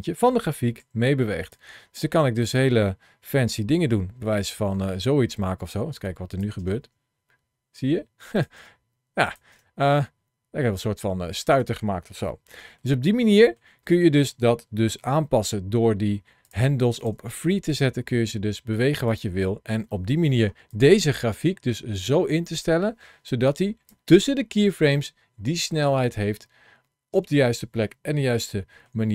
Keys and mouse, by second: 2.3 click, 3.1 g, 5.8 click, 6.4 space, 8.2 click, 8.4 space, 9.1 click, 11.3 space, 12.1 shift+middle click, 13.2 shift+middle click, 14.8 g, 16.2 click, 16.8 click, 18.9 click, 19.7 middle click, 20.3 ctrl+shift+a, 23.1 click, 24.6 space, 26.9 space, 28.2 shift+middle click.